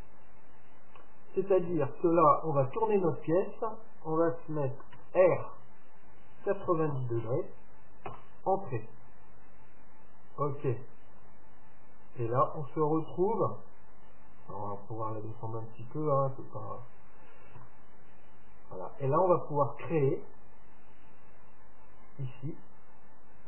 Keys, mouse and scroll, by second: 1.7 KP_1, 5.0 r, 9.7-11.7 middle drag, 11.2 KP_7, 12.5 KP_3, 14.3 middle click, 15.2-17.1 drag, 17.6 KP_7, 20.9 KP_1.